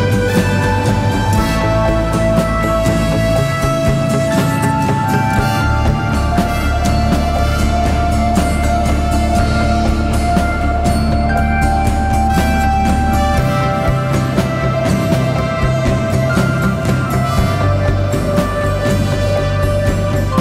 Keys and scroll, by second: 1.2 p, 3.1 p, 4.6 p, 6.0 p, 7.3 p, 8.8 p, 9.7 p, 11.3 p, 12.2 p, 13.2 1, 13.6 4, 15.8 ctrl+z, 17.5 p, 18.8 3.